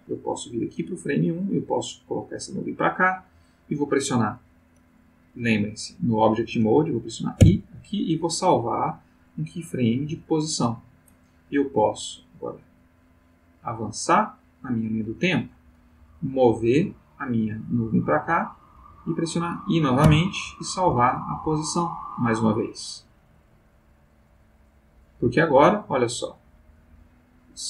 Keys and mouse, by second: 1.3-2.8 drag, 7.4 i, 10.4 click, 12.2-15.3 drag, 16.4-19.0 drag, 20.1 i, 21.2 click, 25.0-27.0 drag.